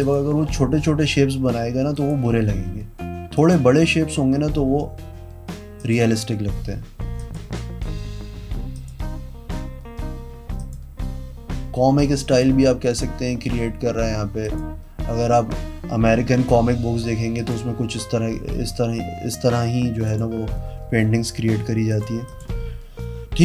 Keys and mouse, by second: 0.2 click, 2.1 click, 3.5 click, 6.0 click, 7.4 click, 8.9 click, 10.7 click, 12.5 click, 14.7 click, 17.5 click, 20.3 click, 22.1 click, 22.5 click.